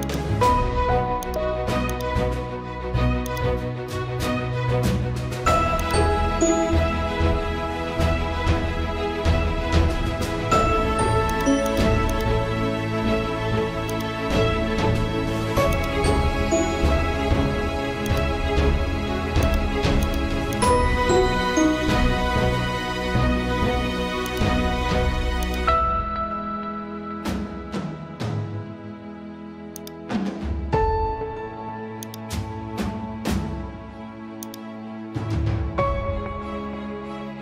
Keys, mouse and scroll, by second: 29.7 click, 30.9 t, 32.0-37.4 drag.